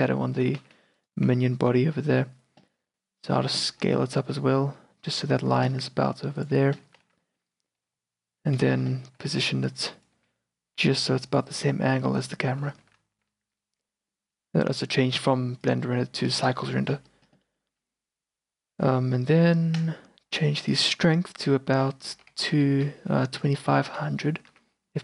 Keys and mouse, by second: 0.5 r, 1.4 s, 3.9-4.2 drag, 4.2 s, 6.9 g, 7.9 r, 8.7 q, 9.1 g, 10.3 r, 12.9 g, 14.0 a, 19.8-22.9 drag, 22.9 KP_0, 24.0 KP_0, 24.6 z.